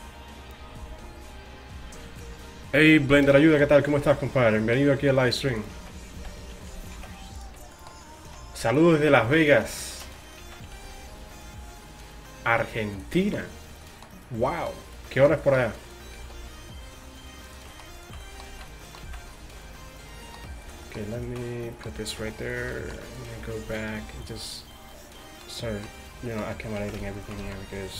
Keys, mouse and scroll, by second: 4.0 z, 5.2-8.3 right drag, 5.8 z, 7.0 alt+m, 8.3 z, 9.5 right click, 10.2 click, 10.5 z, 10.8 alt+s, 15.9-17.7 right drag, 16.2 alt+s, 18.0-19.4 right drag, 18.5 z, 19.1 z, 20.5 g, 22.3 g, 23.8 g, 26.8 z, 27.5 z.